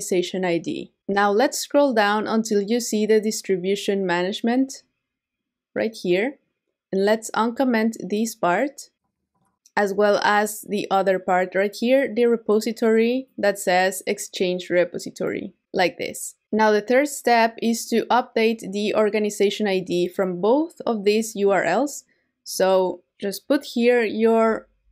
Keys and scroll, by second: 24.8 super+v.